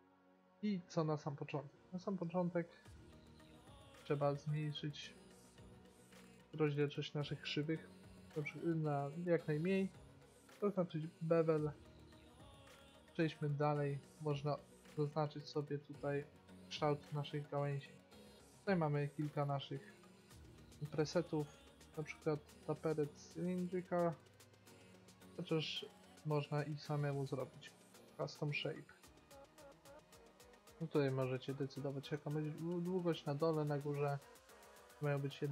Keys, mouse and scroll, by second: 1.9 KP_5, 2.1 KP_3, 3.8-5.6 drag, 7.6-9.1 drag, 11.1-13.3 drag, 13.3 middle click, 15.7-17.7 drag, 18.5-20.5 drag, 25.1 middle click, 26.4-28.3 drag, 30.6-34.4 drag, 34.6-35.5 drag.